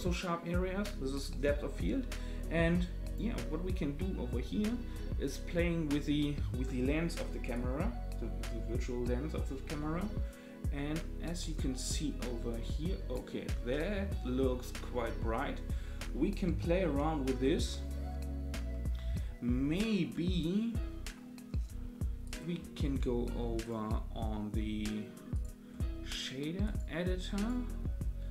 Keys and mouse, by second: 3.1 click, 7.6-13.1 drag, 22.2 click, 23.6-25.4 drag, 26.7-27.5 drag.